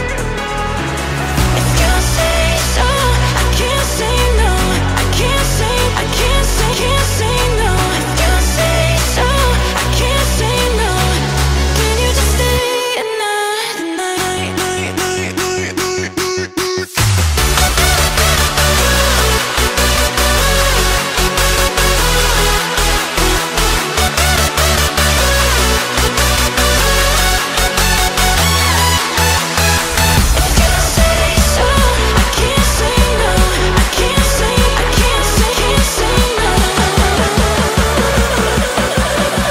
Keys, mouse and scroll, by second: 0.8-1.5 middle drag, 1.5-2.7 scroll up 1, 2.7-3.6 middle drag, 3.6 scroll up 1, 3.8 Tab, 4.4 shift+middle click, 4.9 Tab, 5.2-6.0 middle drag, 6.0 scroll down 1, 6.2 KP_1, 6.7-8.5 shift+middle drag, 8.5 g, 9.7 KP_1, 10.1 shift+middle click, 10.5-11.0 scroll up 1, 11.0 r, 13.2-14.0 middle drag, 14.0 Tab, 15.0 alt+z, 15.2 click, 15.9 KP_1, 16.5-17.2 shift+middle drag, 17.2-19.1 drag, 19.1 middle click, 19.6 alt+z, 19.9 middle click, 20.5 g, 21.7 g, 27.6 Tab, 27.9-28.6 middle drag, 28.6 KP_1, 29.1-30.0 middle drag, 30.0 KP_1, 31.2-32.5 middle drag, 32.5 r, 33.7 KP_1, 34.2 shift+middle click, 34.6 scroll up 1, 34.8-35.1 scroll down 1, 35.1 g.